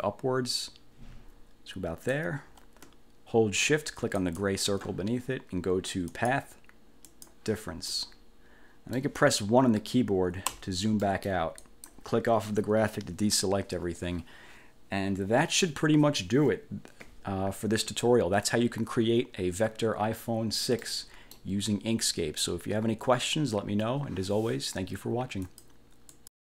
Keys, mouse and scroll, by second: 4.2 shift+click, 6.2 click, 7.2 click, 8.0 middle click, 8.6 click, 10.6 1, 11.2 click, 11.8 click, 21.0 click, 25.6 click, 26.2 click.